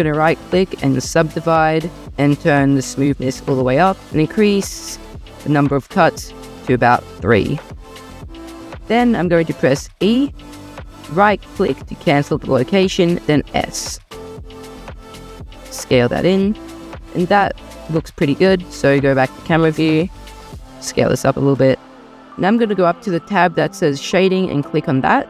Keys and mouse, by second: 0.0-1.1 drag, 1.1 middle click, 3.2 click, 5.7 click, 6.5 click, 10.0 e, 13.1 s, 15.7 click, 16.2 Tab, 18.6 click, 20.4 s.